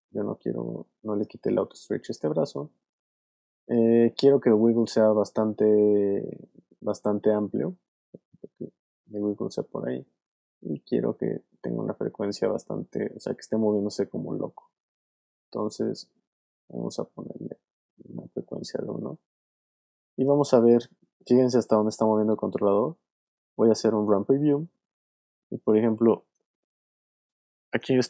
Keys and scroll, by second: 19.5 alt+space, 20.2 space, 24.7 space.